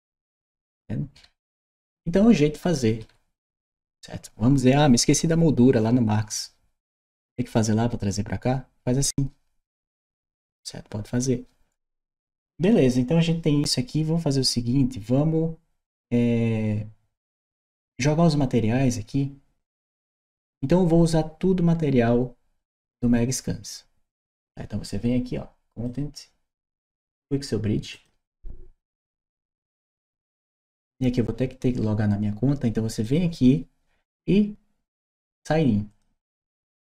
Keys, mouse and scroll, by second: 1.8 d, 11.8 click, 25.6 click, 27.7 click, 32.8 click, 35.7 click.